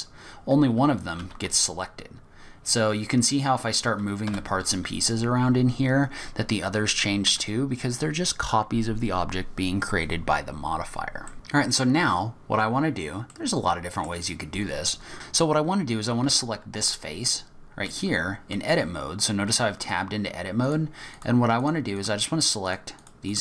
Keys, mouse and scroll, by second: 0.5-1.2 scroll down 1, 1.2-2.4 scroll down 1, 1.2 g, 5.8 scroll down 1, 6.4-7.0 scroll up 1, 7.2 Tab, 10.8-11.2 scroll down 3, 11.2 middle click, 12.4-14.0 scroll up 9, 13.3 middle click, 14.4-14.7 scroll down 3, 14.7-15.1 scroll up 2, 15.1-15.5 scroll down 9, 16.2 3, 17.0-19.2 scroll up 7, 17.8 click, 19.8 click, 20.6 shift+click, 21.1 click, 21.6 shift+click, 21.9 shift+click, 22.6 click.